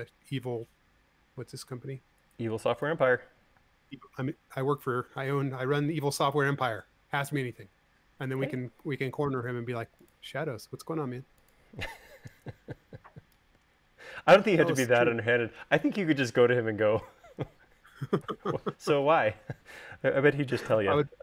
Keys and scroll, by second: 4.6 space.